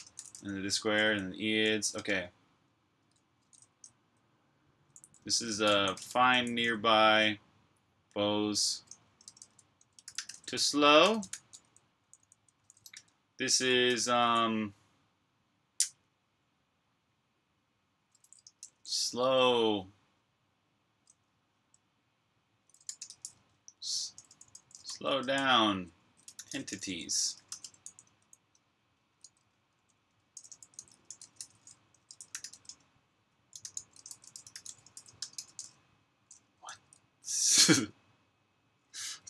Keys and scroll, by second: 0.0-2.0 typing, 3.1-7.3 typing, 8.8-14.0 typing, 17.7-18.9 typing, 22.4-36.5 typing, 37.6 u.